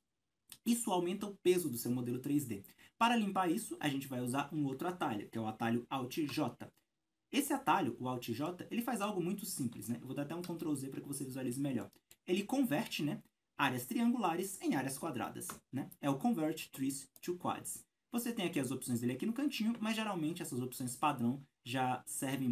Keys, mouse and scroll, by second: 7.4-8.4 alt+scroll up 3, 8.4-8.8 scroll up 1, 8.8-10.3 shift+middle drag, 9.3-10.3 scroll up 2, 10.6 ctrl+z, 11.1 shift+middle click, 11.8-22.1 middle drag, 15.7 alt+i, 16.8 alt+j, 22.1-22.5 scroll down 4, 22.4 Tab.